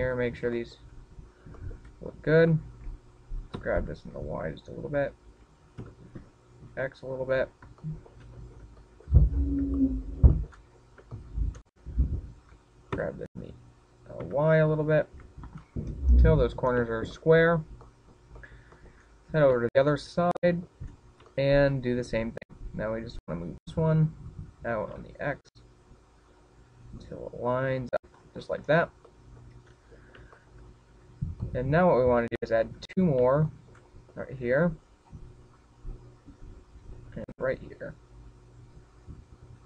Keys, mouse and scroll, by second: 0.0 shift+middle click, 0.7-1.1 scroll up 6, 1.1 shift+middle click, 1.5 scroll up 3, 1.8 shift+middle click, 2.4 scroll up 2, 2.9 shift+middle click, 3.9 alt+right click, 4.9 g, 5.9 click, 6.4 alt+right click, 7.1 g, 8.6 click, 8.8 scroll down 3, 9.1 shift+middle click, 9.5-10.1 scroll down 1, 10.1 shift+middle click, 10.1-10.6 scroll down 5, 10.6-10.9 scroll up 7, 11.1 shift+middle click, 11.6 shift+middle click, 12.0-12.3 scroll up 3, 12.4 shift+middle click, 13.6 alt+right click, 14.2 g, 16.7 click, 16.9-18.4 scroll down 17, 18.4 shift+middle click, 19.2 shift+middle click, 19.7 shift+middle click, 20.1 shift+middle click, 20.6-20.9 scroll up 5, 20.9 shift+middle click, 21.4 scroll up 2, 21.8 shift+middle click, 22.3 scroll up 2, 22.7 shift+middle click, 24.1 alt+right click, 25.1 g, 29.4 click, 29.7-30.6 scroll down 9, 30.6 shift+middle click, 31.4-31.7 scroll down 3, 31.9 shift+middle click, 33.0 middle click, 33.9 shift+middle click, 34.5-34.9 scroll up 9, 35.0 shift+middle click, 36.0 ctrl+r, 38.5 click, 38.8 ctrl+r.